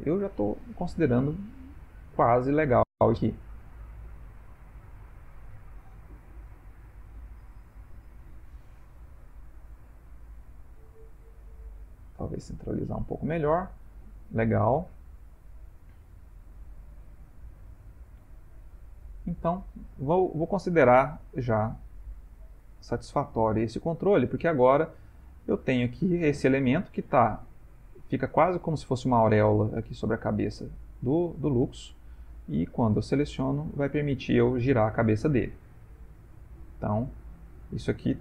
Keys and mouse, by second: 6.5 g, 12.6 middle click, 18.3 middle click, 19.3 middle click, 19.6 Tab, 20.1 middle click, 22.8 middle click, 23.6 ctrl+middle click, 24.0 ctrl+middle click, 24.4 middle click, 25.8 ctrl+middle click, 25.9 click, 26.7 middle click, 30.3 middle click, 30.4 r, 35.6 ctrl+middle click, 35.9 ctrl+middle click, 36.4 ctrl+middle click, 37.3 click.